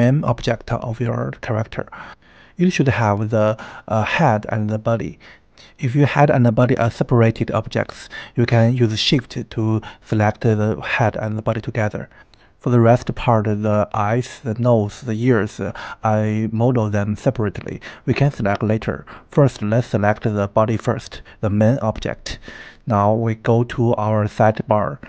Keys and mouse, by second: 1.9 click, 8.1-8.7 middle drag, 11.9 click, 12.4 g, 12.7 click, 13.4 click, 13.8 g, 14.2 click, 15.2 middle click, 17.0 KP_1, 18.4 shift+middle drag, 18.7 shift+middle click, 22.4 click, 23.3 shift+click, 24.3 click.